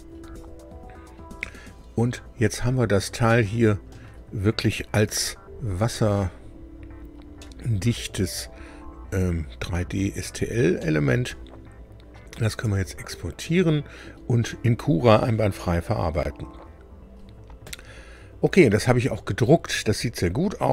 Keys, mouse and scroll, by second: 2.5 scroll up 1, 3.3 middle click, 5.1 Tab, 6.5-7.0 scroll up 2, 7.4 middle click, 7.4-10.1 drag, 10.3-10.6 scroll down 1, 10.7 middle click, 12.6 Tab.